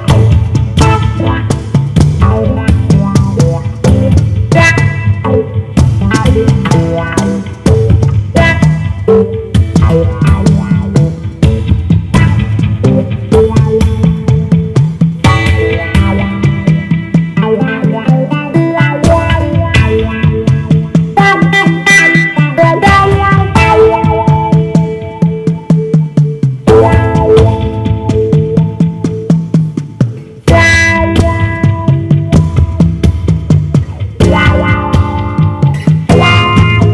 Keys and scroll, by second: 2.6-4.3 typing, 15.8 d, 21.5 super+d, 26.3 super+d, 36.3 super+z.